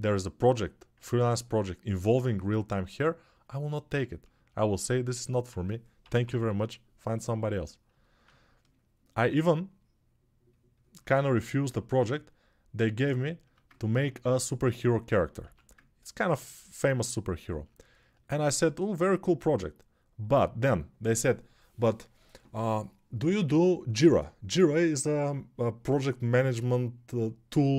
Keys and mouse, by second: 5.8 p, 6.0-11.4 right drag, 11.4-27.7 alt+shift+drag, 14.8 right click, 15.1-22.0 right drag, 15.2 1.